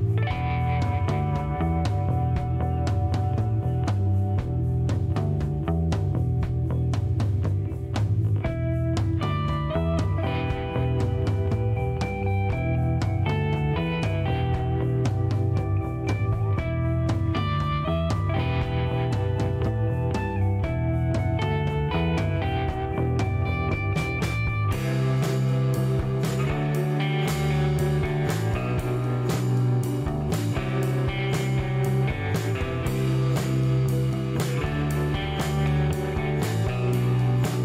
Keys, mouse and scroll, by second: 0.2 click, 1.2 KP_6, 1.3 KP_0, 1.8 KP_Enter, 4.3 scroll down 2, 4.4 middle click, 9.2 click, 12.1 click, 13.9 click, 14.4 right click, 14.8 scroll up 2, 15.4 middle click, 19.7 click, 20.6 click, 21.9 click, 22.9 KP_6, 23.1 KP_0, 23.3 KP_Enter, 24.6 click, 26.0-27.8 drag, 28.6 middle click, 31.0 click, 32.0 click, 33.4 click, 34.8 click, 35.8 click.